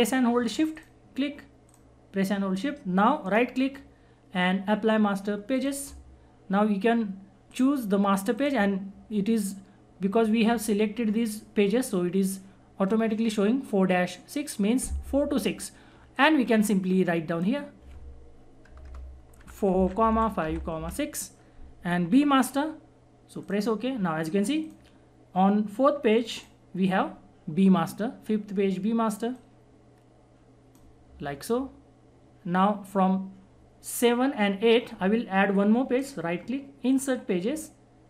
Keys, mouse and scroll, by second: 0.7 shift+click, 3.2 shift+right click, 3.3 shift+right click, 5.5 shift+click, 16.2-18.7 shift+drag, 18.7-21.3 typing, 23.5 shift+click, 29.3 click, 29.4-31.2 shift+drag, 31.2 shift+scroll up 1, 36.0 shift+right click, 36.9 shift+click.